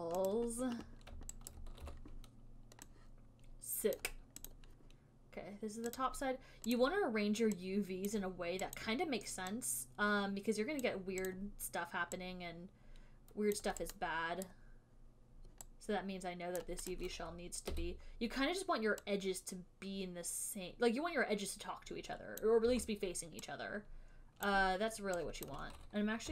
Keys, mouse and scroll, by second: 0.6 click, 1.8 alt+right click, 2.2 w, 4.3 click, 4.8 click, 6.3 click, 7.1 click, 8.4 click, 9.2 click, 11.2 click, 11.7 click, 13.9 click, 14.9 right click, 17.0 right click, 17.2 click, 22.4 e, 22.7 click, 23.0 w, 24.8 click, 25.8 click.